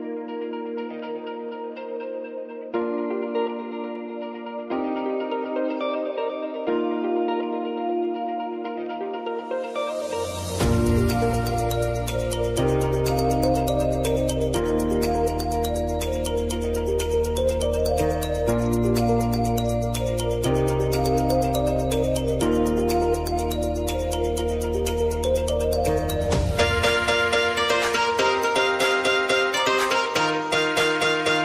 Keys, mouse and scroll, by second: 0.6 u, 2.6 click, 12.1 ctrl+a, 13.9 l, 16.3 space, 16.6 s, 17.5-24.3 drag, 25.2 u, 25.7 space, 28.7-30.5 drag, 30.5 j.